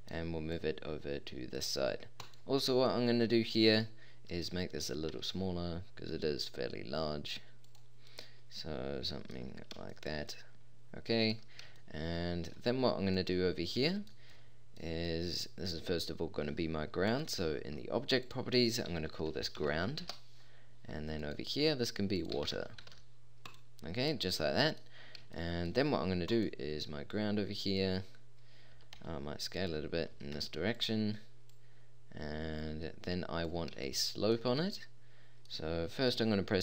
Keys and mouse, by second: 1.5-2.5 drag, 2.5-3.0 middle drag, 3.1 middle click, 3.3 middle click, 3.6-3.9 middle drag, 5.1 s, 10.5 middle click, 17.1-20.1 drag, 21.2 click, 26.9 click, 28.7 s, 30.1 s.